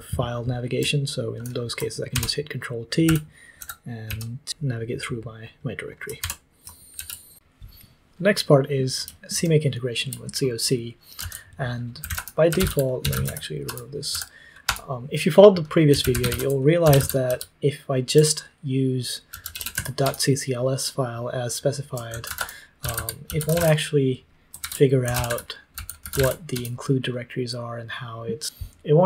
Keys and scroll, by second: 2.1 ctrl+t, 3.0-5.0 typing, 6.2 ctrl+t, 6.9 ctrl+c, 7.2 typing, 9.3 super+l, 11.1 super+l, 11.7-14.6 typing, 13.6 Return, 14.6 Return, 15.6-20.2 typing, 21.8-26.6 typing.